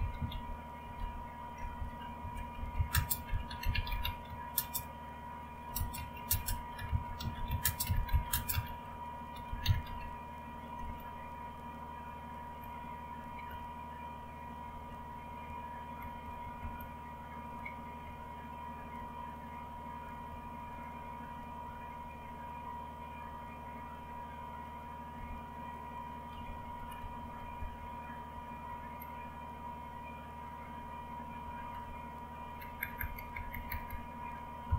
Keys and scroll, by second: 0.0-11.3 typing, 12.3-15.1 typing, 15.2 Down, 15.4 Down, 15.9 Down, 16.2 Down, 16.5 Down, 16.7-17.5 Down, 17.8-20.0 typing, 20.6 Up, 21.2 Up, 21.6 Up, 21.9 Up, 23.1 Up, 24.9-27.5 typing, 27.5 Up, 27.7 Up, 28.3 Up, 28.6 Up, 30.6 Up, 31.4 Up, 31.7 Up, 32.3-34.7 typing, 33.8 Down.